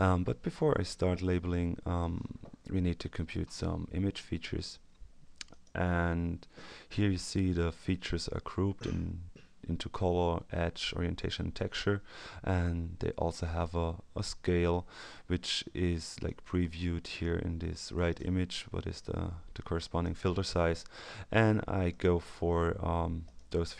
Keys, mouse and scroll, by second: 5.5 click, 16.2-20.5 drag, 21.9 click, 23.2 click.